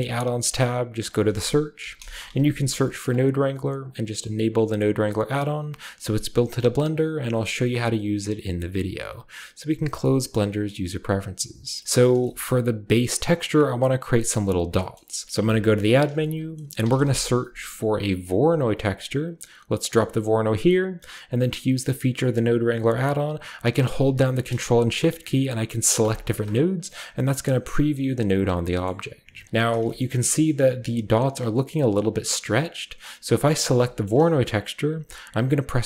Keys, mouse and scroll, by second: 0.1 click, 1.0 click, 1.5-2.8 typing, 3.0 drag, 3.8 click, 11.0 click, 11.6 scroll down 1, 11.8-12.2 middle drag, 12.4-14.8 shift+middle drag, 14.9-16.1 middle drag, 15.4 typing, 16.0-17.9 drag, 16.8 typing, 18.5 click, 19.8 click, 19.9 typing, 26.0 ctrl+shift+click, 28.2 drag, 28.8-29.8 middle drag, 30.0-32.7 scroll up 2, 32.7 scroll down 2, 33.3 click, 35.7 ctrl+t.